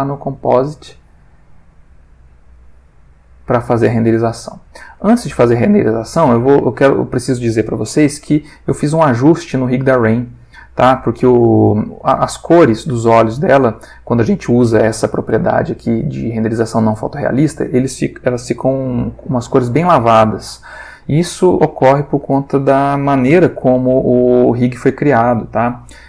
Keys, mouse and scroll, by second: 0.0 click, 0.8-1.8 drag, 2.5-3.7 drag, 3.9 click, 4.6-5.6 ctrl+middle drag, 6.0-7.4 middle drag, 8.3 alt+click, 9.3 alt+middle click, 18.6 alt+v.